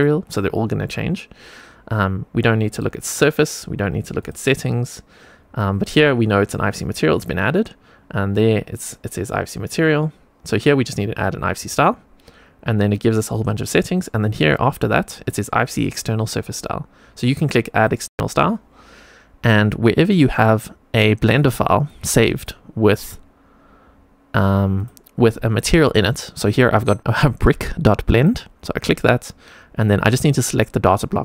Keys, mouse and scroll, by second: 2.6 click, 4.1 click, 11.5 click, 17.6 click.